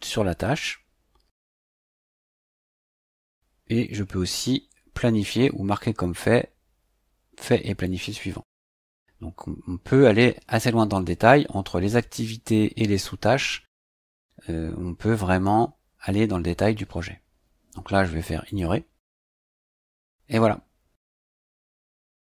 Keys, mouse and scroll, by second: 18.5 click.